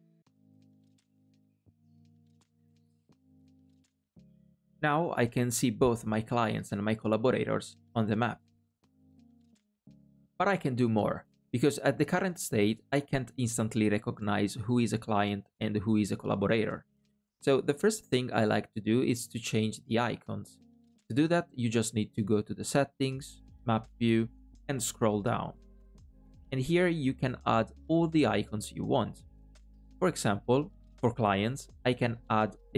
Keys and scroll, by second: 21.6 super+,, 29.5 alt+a.